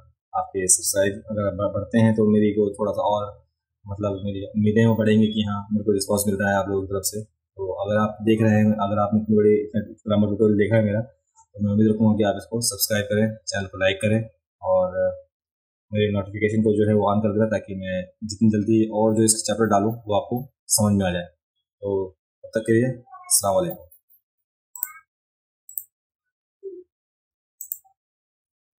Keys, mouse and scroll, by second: 24.8 click, 25.7 click, 27.6 click.